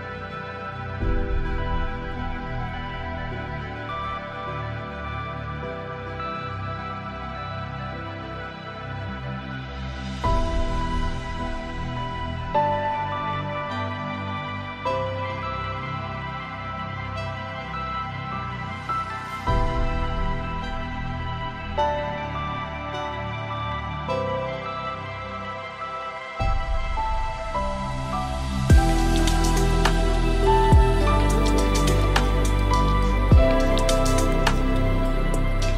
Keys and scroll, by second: 9.3 ctrl+shift+Return, 13.5 ctrl+d, 14.1 ctrl+space.